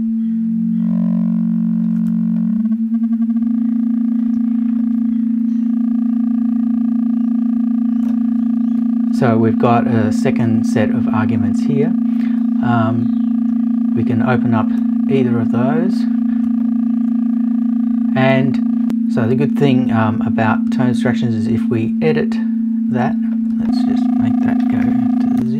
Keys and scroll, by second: 25.4 Return.